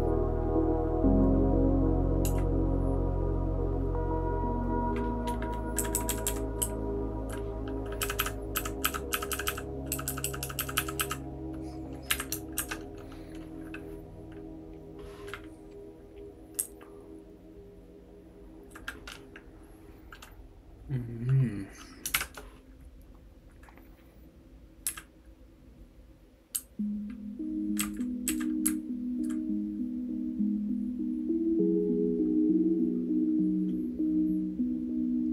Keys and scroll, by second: 2.2 *, 5.7 Down, 5.9 Down, 6.1 Down, 6.2 Down, 6.6 Right, 7.1 Right, 7.2 Right, 7.2 Right, 8.0-11.0 typing, 12.1 Up, 12.5 shift+4, 16.6-18.6 Left, 24.8 Down, 26.5 Right, 26.9-27.7 Right, 27.8 Down, 28.2 Down, 28.6 Right, 29.1 Right.